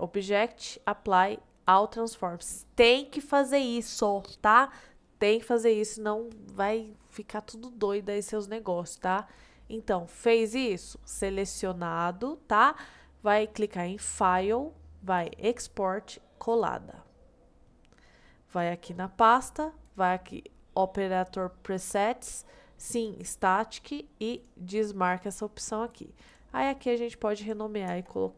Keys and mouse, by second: 11.2-12.2 middle drag, 14.3-16.7 drag.